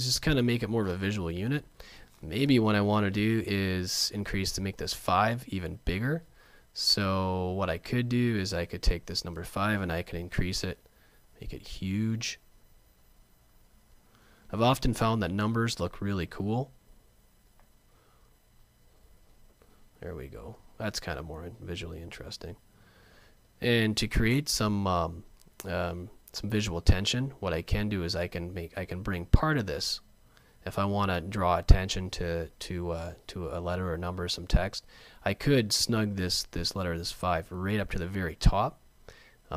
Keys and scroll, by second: 5.9 super+z, 10.0 alt+shift+super+., 34.2 super+z.